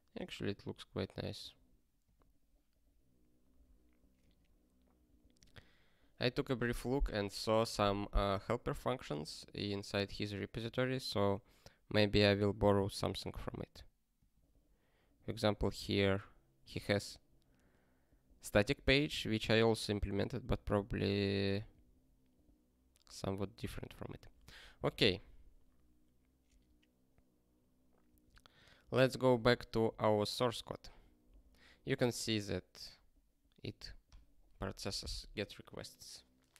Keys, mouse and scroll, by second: 28.0 ctrl+p, 29.9 click.